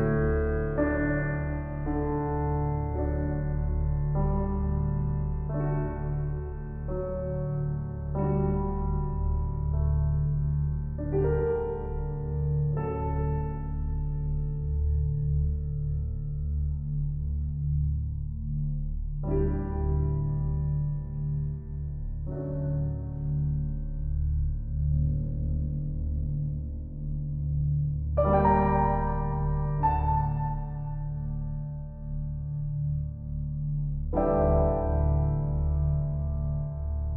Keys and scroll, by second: 7.6 shift+s, 16.1 shift+s.